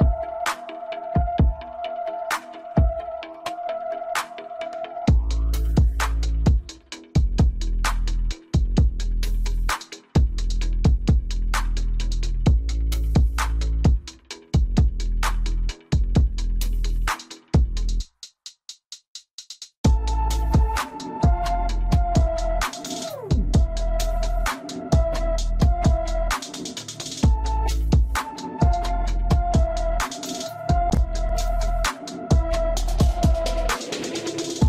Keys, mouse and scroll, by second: 1.2-1.6 scroll up 1, 1.6-3.9 middle drag, 3.9 alt+s, 6.4-9.5 middle drag, 9.5 ctrl+z, 20.0-20.3 scroll down 2, 20.3-21.6 middle drag, 21.6-21.9 scroll up 2, 21.9-23.6 middle drag, 23.6 Tab, 24.3 Tab, 25.1 click, 26.0-27.0 scroll down 1, 27.0 KP_7, 27.9-29.7 scroll up 2, 30.3 shift+d.